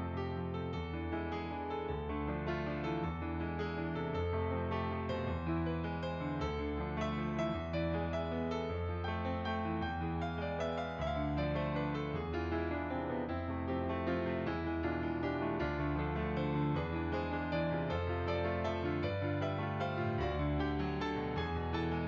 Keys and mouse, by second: 2.1 shift+click, 4.9 middle click, 6.6 middle click, 7.4 click, 10.0 click, 14.0 click, 18.5 f, 18.6 click.